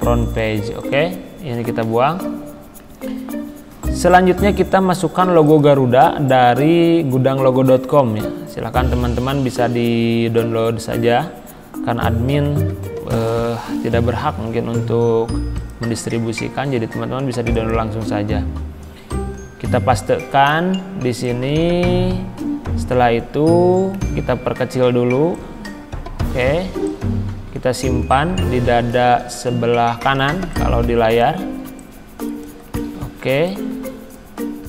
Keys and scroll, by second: 1.9 Delete, 9.3 ctrl+z, 10.9 ctrl+c, 12.3 ctrl+c, 19.2 ctrl+v, 33.3 z.